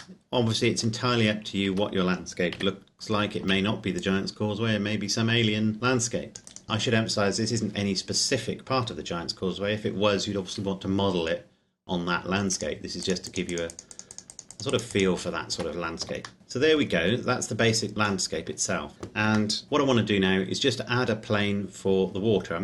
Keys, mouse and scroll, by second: 0.4 middle click, 2.0 a, 2.8 x, 3.7 c, 4.1 click, 6.4 right click, 6.6 ctrl+KP_Add, 12.6 click, 15.5 Tab, 16.4 middle click, 17.0-18.7 scroll down 1, 19.6 middle click, 19.6 click.